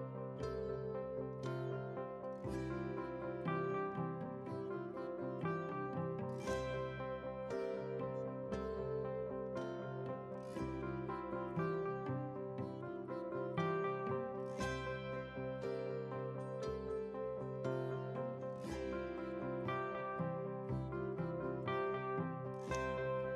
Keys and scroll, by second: 0.3 ctrl+a, 12.3 ctrl+space, 14.7 ctrl+a, 17.6 ctrl+a, 22.7 shift+F11.